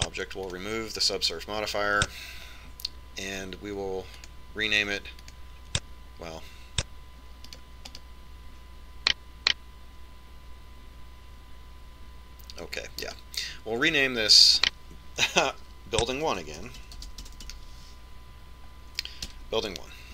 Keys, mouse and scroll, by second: 0.0 click, 2.0 click, 5.7-8.5 drag, 9.4 right click, 14.6 right click, 15.9 click.